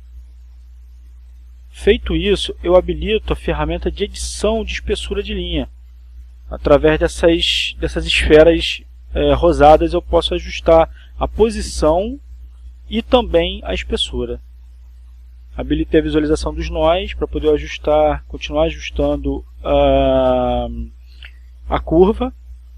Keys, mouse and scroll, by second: 0.8-3.2 drag, 6.0 click, 7.1-8.2 drag, 8.8-11.2 drag, 11.3 click, 14.8 click, 17.4-18.4 drag, 19.0 click, 20.3 click.